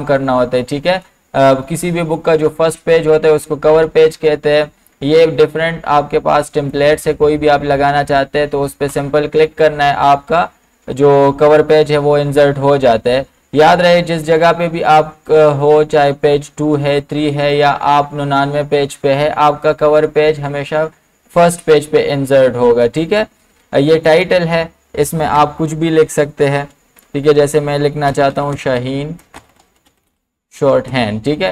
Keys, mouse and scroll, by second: 6.7-8.9 drag, 24.0 click, 24.1 click, 25.3 BackSpace, 27.9-30.6 typing.